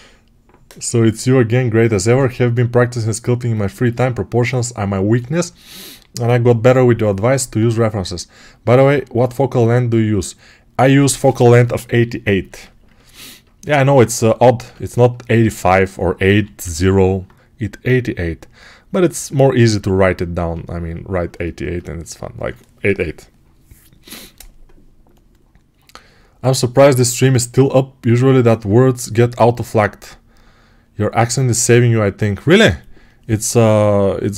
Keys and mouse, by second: 14.0-19.0 alt+right drag, 16.2 g, 19.0-34.3 ctrl+alt+drag.